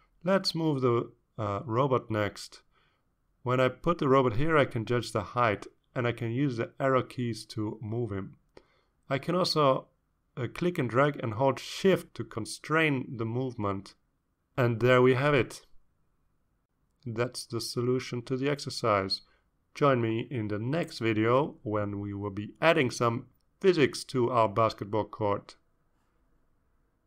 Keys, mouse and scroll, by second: 0.1-3.2 drag, 3.9 BackSpace, 4.4 BackSpace, 7.0-15.2 drag, 15.8 click, 17.0-18.4 drag, 18.5-18.8 scroll down 2, 20.0 scroll down 2, 20.6-21.6 scroll up 4, 21.9 scroll down 2, 23.4-24.5 drag.